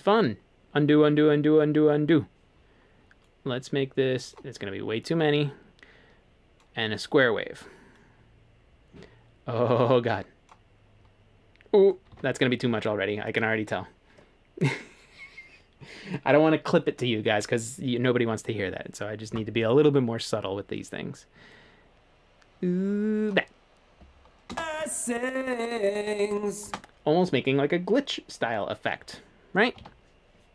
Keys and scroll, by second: 12.1 super+z, 24.5 space, 26.7 space, 29.8 super+z.